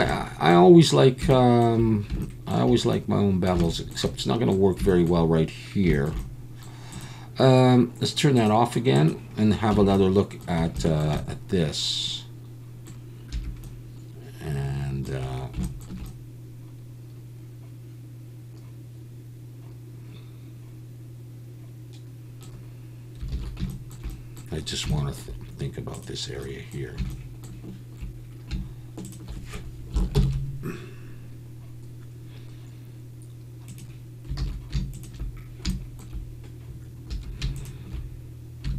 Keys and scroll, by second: 9.7 Tab, 13.3 1, 23.3 alt+a, 30.1 ctrl+shift+b, 34.4 alt+a, 37.1 2.